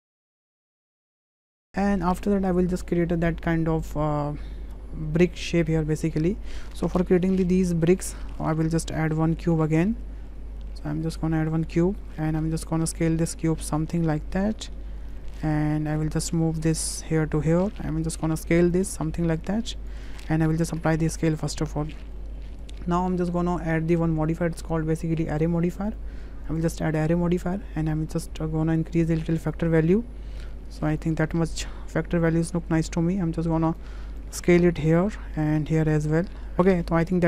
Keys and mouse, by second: 0.0 click, 0.2 shift+click, 0.6 shift+click, 1.0 ctrl+shift+b, 1.4 Delete, 1.4 3, 1.5 click, 1.6 shift+click, 2.1 shift+middle click, 7.1 Tab, 8.2 shift+click, 8.8 shift+a, 12.1 shift+click, 13.7-15.1 drag, 15.5 middle drag, 16.4 w, 16.9 click, 18.7-19.9 drag, 20.7 ctrl+a, 21.6-22.2 middle drag, 23.2 middle drag, 25.4 drag, 26.0-26.6 drag, 29.0-31.0 drag, 32.8-33.8 drag, 34.3 click, 35.6 click, 36.5 ctrl+a.